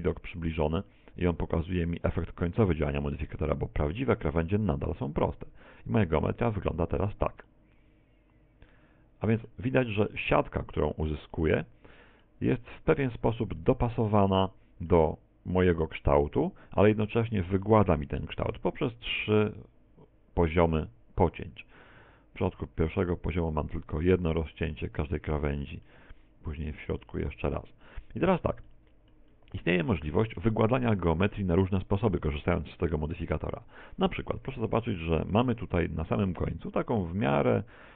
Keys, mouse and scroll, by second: 0.3 shift+middle click, 0.9 middle click, 6.4 click, 7.5 middle click, 9.8 middle click, 10.4 z, 11.1 middle click, 12.6 middle click, 13.6 middle click, 14.3 middle click, 20.9 click, 21.3 click, 24.8 middle click, 27.1 middle click, 27.9 middle click, 28.7 middle click, 29.4 middle click, 30.0 middle click, 31.0 middle click, 31.8 middle click, 33.2 KP_1, 33.6 KP_7, 34.4 scroll down 4, 34.8 shift+middle click, 36.4 Tab.